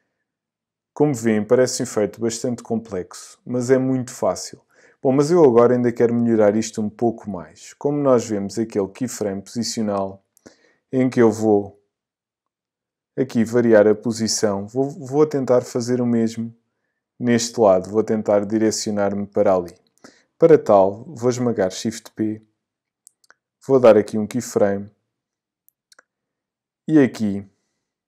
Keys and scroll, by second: 21.7 shift+p.